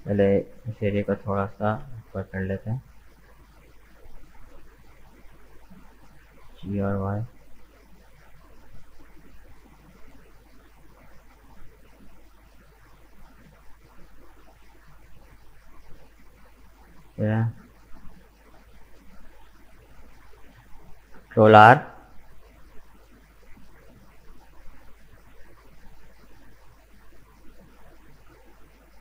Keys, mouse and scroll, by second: 0.1 shift+right click, 0.4-1.5 middle drag, 1.5 g, 5.5-6.2 scroll up 1, 6.2 g, 8.9 g, 11.4 scroll down 2, 11.7-14.0 middle drag, 14.0 Tab, 14.1 right click, 14.4 scroll down 1, 14.6-16.1 middle drag, 16.1 scroll up 2, 16.4 middle click, 16.8-17.3 scroll up 1, 17.3 right click, 17.8 Tab, 18.2 scroll down 1, 18.5-21.3 middle drag, 21.3 ctrl+r, 27.1 Tab, 27.2 right click, 27.7 middle click, 28.5 right click, 28.9 Tab.